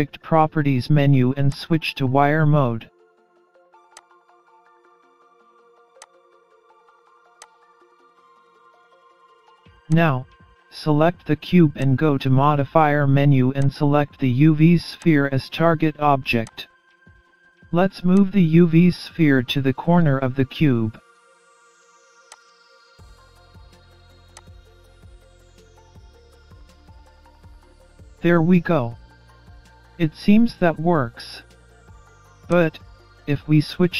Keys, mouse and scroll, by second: 0.5 middle click, 2.2 middle click, 5.1 click, 6.0-6.8 scroll down 11, 7.6 click, 8.0-9.2 scroll down 7, 9.6 click, 11.9-13.0 scroll up 1, 13.6 click, 15.4 click, 17.2 click, 20.1 click, 21.8 click, 26.0 click, 28.0 click, 30.6-31.3 scroll up 7, 31.3 middle click, 32.5-32.9 scroll up 2, 32.9 middle click, 33.8 scroll down 4.